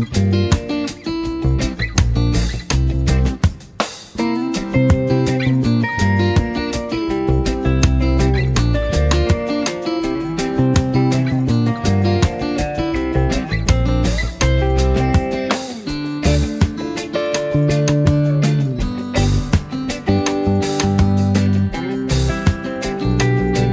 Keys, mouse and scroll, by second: 0.5-4.8 drag, 6.3 space, 6.4 click, 10.5 space, 10.6 click, 12.3-15.5 alt+drag, 15.8 space, 16.0 click, 17.0 space, 18.1 space, 18.5 click, 18.8 space, 19.4-20.1 drag, 21.1 right click, 22.2-23.7 drag.